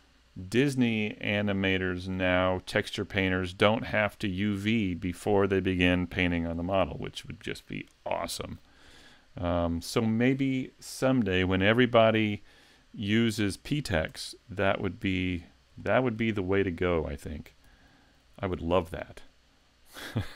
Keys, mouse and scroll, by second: 14.2 Tab, 15.1 a, 15.3-15.8 scroll up 2, 15.8 shift+middle click, 17.7 l, 18.2 l.